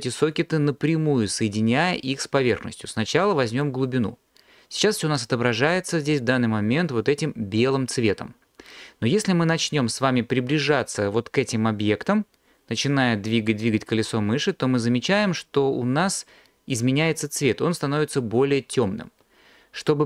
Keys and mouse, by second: 0.9 click.